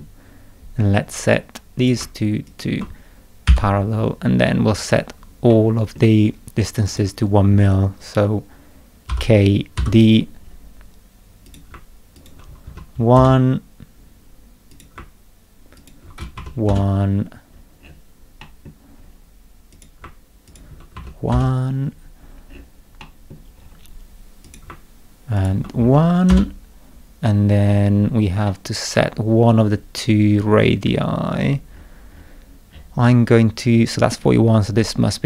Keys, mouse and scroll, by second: 0.9 scroll up 2, 1.8 click, 2.5 ctrl+click, 3.5 p, 4.5-4.9 scroll up 2, 4.9 scroll down 2, 5.5 middle click, 6.8 click, 9.1 k, 9.8 d, 10.3-10.6 scroll up 2, 11.4 click, 12.1 ctrl+click, 12.7 1, 13.1 Return, 14.7 click, 15.8 ctrl+click, 16.3 1, 16.7 Return, 17.5-17.8 scroll up 1, 17.8 scroll down 1, 18.4 middle click, 19.0 scroll down 2, 19.7 click, 20.5 ctrl+click, 20.9 1, 22.2 scroll up 2, 22.5 scroll down 2, 23.0 middle click, 23.5-23.8 scroll up 2, 24.4 click, 25.4 ctrl+click, 25.8 1, 26.3 Return, 27.2-27.6 scroll up 2, 27.6-28.2 scroll down 4, 28.4 scroll up 2, 28.6 middle click, 30.9-32.4 scroll up 8, 32.7-33.6 scroll up 6.